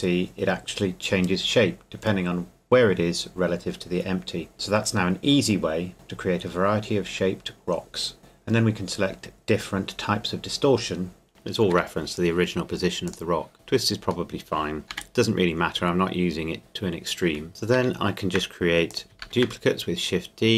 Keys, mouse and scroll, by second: 4.5 click, 5.4 shift+middle click, 8.7 click, 11.7 Escape, 13.1 click, 13.5 middle click, 14.9 g, 17.5 KP_3, 17.7 shift+d, 19.1 shift+click, 19.2 shift+d.